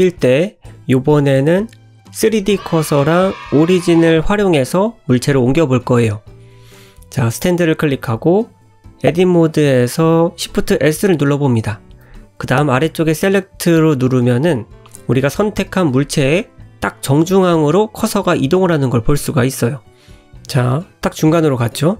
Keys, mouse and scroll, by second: 0.3 middle click, 2.6 click, 5.2 Tab, 5.8 middle click, 6.4 shift+middle click, 6.8 click, 7.3 click, 7.7-8.3 scroll up 3, 9.8 shift+s, 12.5 middle click, 15.3 1, 16.6 click, 18.1 shift+click, 19.1 shift+s.